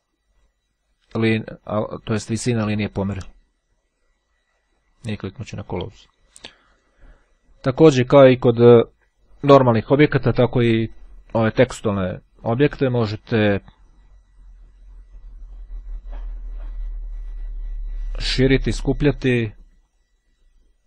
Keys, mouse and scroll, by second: 5.6-6.6 drag, 6.8 click, 11.4-12.0 shift+scroll up 2, 13.1 click, 15.6-20.0 drag.